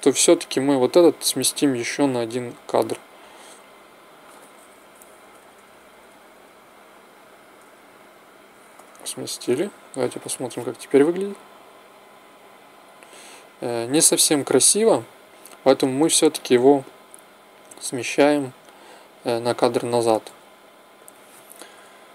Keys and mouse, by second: 2.7 g, 11.0 alt+a, 13.0 Escape, 21.6 g.